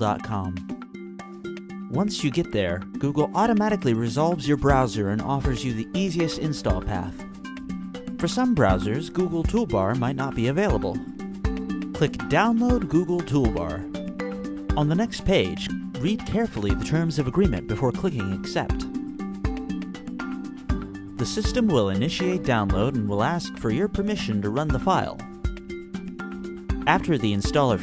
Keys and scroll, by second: 0.0-5.5 typing, 5.9 Return.